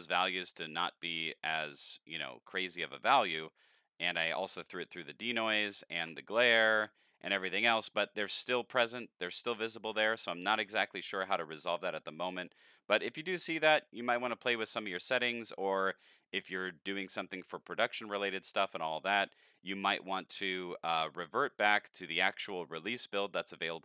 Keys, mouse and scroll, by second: 3.2 middle click, 4.0 shift+click, 6.8 middle click, 8.2 middle click, 12.4 middle click, 15.1 click.